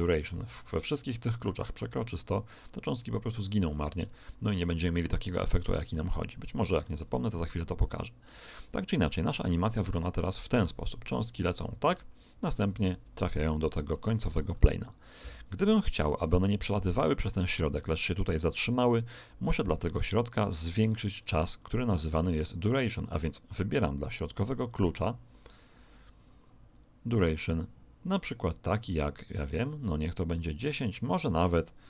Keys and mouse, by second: 5.9-9.3 middle drag, 9.3 click, 9.9 alt+a, 13.9 Escape, 14.5 alt+a, 18.1 Escape, 18.6 right click, 21.8 right click, 24.2 click, 27.1 click.